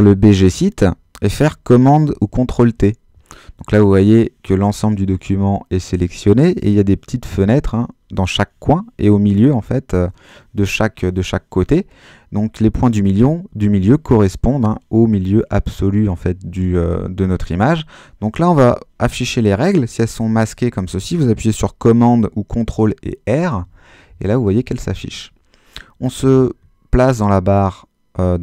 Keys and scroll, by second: 2.2 super+t, 20.3 super+r, 23.6 super+r.